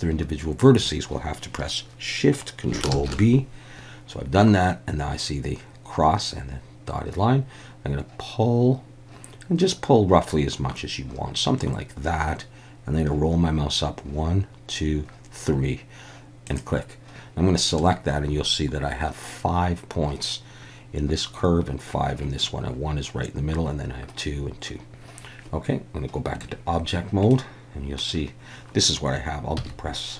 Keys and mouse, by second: 2.9 ctrl+shift+b, 16.5 click, 17.8 a, 26.4 Tab, 27.3-28.0 middle drag, 29.6 z.